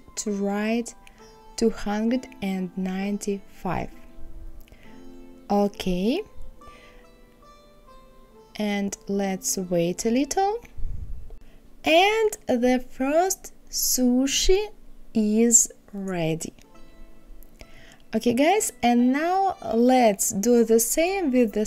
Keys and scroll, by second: 0.7 KP_2, 1.0 KP_9, 1.3 KP_5.